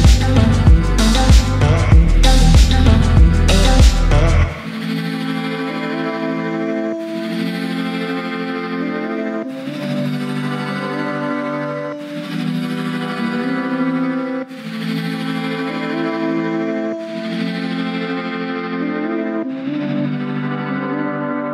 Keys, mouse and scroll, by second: 0.3 alt+shift+click, 1.6 alt+shift+click, 2.8 alt+shift+click, 4.1 alt+shift+click, 5.4 alt+shift+click, 6.1-6.6 scroll up 2, 6.6 middle click, 8.9-10.0 drag, 10.9-13.3 drag, 13.8 middle click, 17.0 scroll down 1, 17.5 Tab, 18.0-18.9 middle drag, 21.0 click.